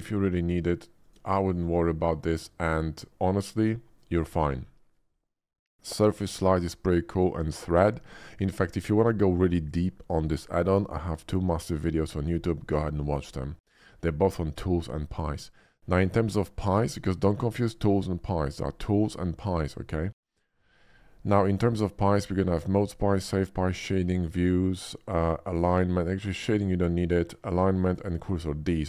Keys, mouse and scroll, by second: 1.0 click, 13.3 middle click, 18.2 middle click, 23.0 click, 23.7 click, 24.1 click, 24.6 click, 26.3 click, 27.8 click.